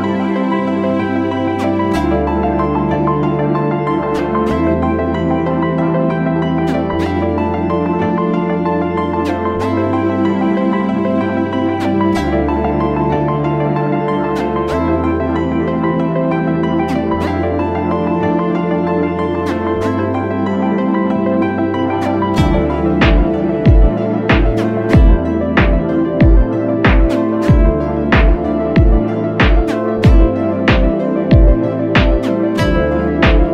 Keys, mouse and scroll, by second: 11.6 ctrl+t, 12.5 alt+shift+click, 13.7 Right, 13.9 Right, 14.5 Right, 14.6 Right, 14.9 Left, 15.1 Left, 16.5 alt+shift+click, 19.8 Return, 20.5 Right, 26.3 double click.